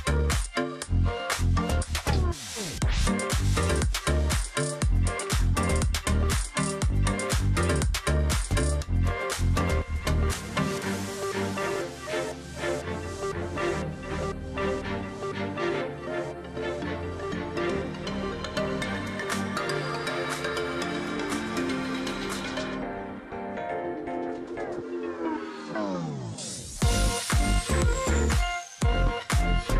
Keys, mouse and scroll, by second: 2.3 ctrl+click, 5.0 space, 5.4 double click, 6.7 shift+click, 7.7 alt+click, 8.8 double click, 9.0 alt+scroll down 1, 9.3 space, 9.8-10.4 alt+scroll up 1, 11.2 alt+scroll up 1, 11.5 space, 12.6 ctrl+z, 14.8 ctrl+z, 15.5 ctrl+z, 17.2 alt+click, 17.4 ctrl+click, 19.3 double click, 21.2 shift+click, 22.0 alt+click, 22.6 ctrl+click, 22.8 alt+scroll down 1, 23.1 space, 23.5-24.0 alt+scroll down 1, 24.4-25.0 alt+scroll up 1, 25.4 space, 26.9 alt+scroll down 1, 27.2 space, 27.5-28.1 alt+scroll up 1.